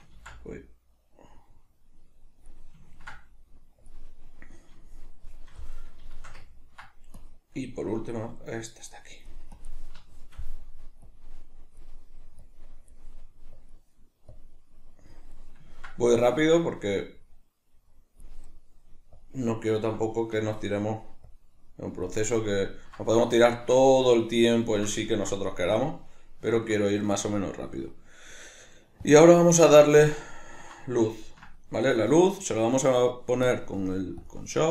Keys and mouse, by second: 0.2 ctrl+z, 2.9-3.8 ctrl+middle drag, 3.8-4.6 drag, 4.6-7.2 middle drag, 7.2-10.0 drag, 10.0-11.0 shift+middle drag, 11.0-15.3 drag, 15.3-17.0 middle drag, 17.0-18.5 drag, 18.5-19.1 middle drag, 19.1-20.0 drag, 20.0-21.3 middle drag, 21.3-22.3 drag, 22.3-29.0 middle drag, 29.0-30.0 drag, 30.0-33.5 ctrl+middle drag, 33.5-34.7 drag.